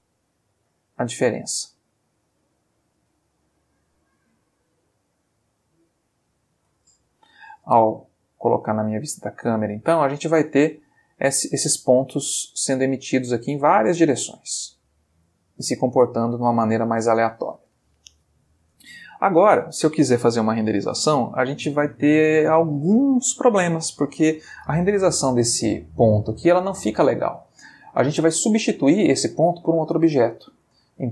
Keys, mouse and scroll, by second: 2.6-3.5 middle drag, 8.8 click, 17.1 space, 30.3-31.0 middle drag.